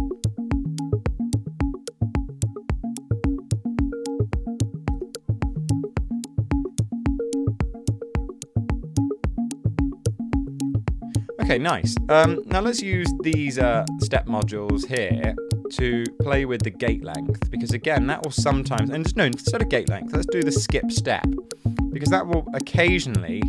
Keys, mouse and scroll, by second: 0.0-0.1 typing, 5.1 super+z.